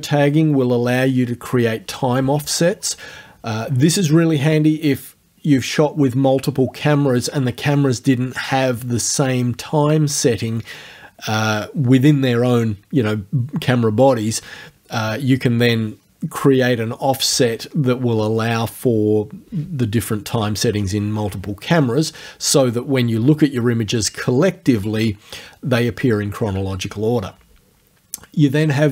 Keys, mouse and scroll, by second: 28.6 click.